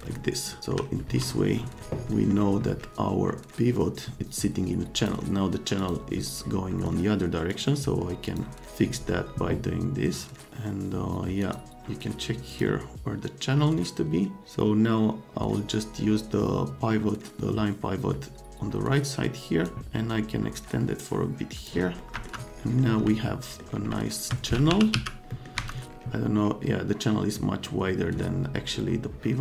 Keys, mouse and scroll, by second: 0.0-0.7 scroll up 4, 1.1 scroll up 2, 2.1 middle click, 4.9 click, 5.8 click, 7.5 click, 8.3 click, 11.4 click, 12.5 click, 19.6-21.6 drag, 22.0 middle click, 22.1 F3, 22.6-22.9 scroll up 4, 22.6 middle click, 23.2 middle click, 23.5 scroll down 2, 24.1-24.6 scroll down 4, 24.4-25.4 typing, 25.3 middle drag, 25.6 F3.